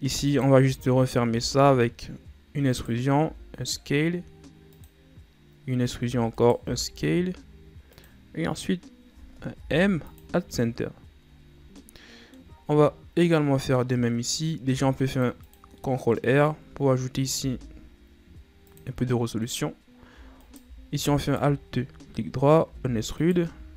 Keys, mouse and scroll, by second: 0.4 alt+right click, 1.4 e, 3.3 s, 6.1 e, 6.7 s, 9.7 m, 10.9-11.9 scroll down 7, 11.9 middle click, 12.7-13.1 shift+scroll down 4, 13.1-13.5 scroll up 1, 13.5-14.8 middle drag, 14.8 ctrl+r, 15.9 middle click, 16.5-17.5 ctrl+scroll down 2, 17.5 g, 19.2-20.5 middle drag, 20.5 alt+right click, 21.3 alt+right click, 22.1-22.4 scroll up 1, 22.7 e, 23.6 s.